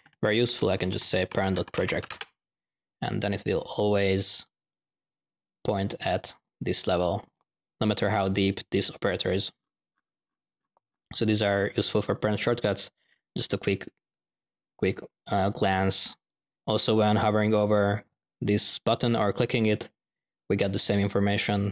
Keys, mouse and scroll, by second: 4.4 right click, 5.5 click, 7.0 click, 19.0-19.8 drag.